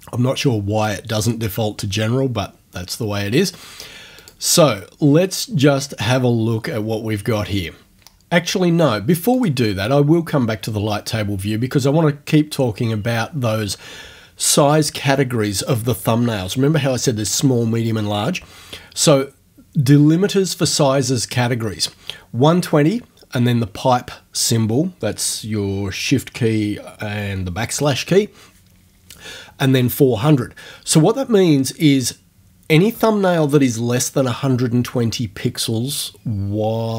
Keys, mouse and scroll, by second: 4.2 click, 9.3 click.